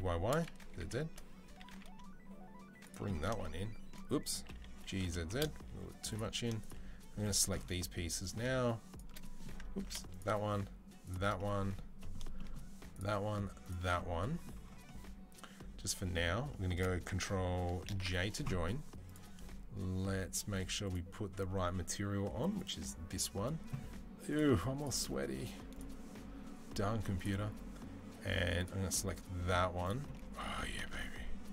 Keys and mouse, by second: 0.7 shift+middle click, 1.7-2.7 shift+middle drag, 3.1-6.4 shift+middle drag, 4.6 g, 6.4 click, 6.5-7.0 middle drag, 7.0 click, 7.1-8.7 middle drag, 8.7-9.4 shift+middle drag, 9.4 ctrl+drag, 9.7 ctrl+z, 9.7-12.7 middle drag, 12.7-13.5 shift+drag, 13.5-18.9 shift+middle drag, 17.8 ctrl+j, 18.9 drag, 19.0-20.6 middle drag, 20.6 click, 20.7-24.1 middle drag, 24.1 click, 24.2 middle click, 24.6-27.1 drag, 27.1-31.5 middle drag, 31.0 ctrl+s.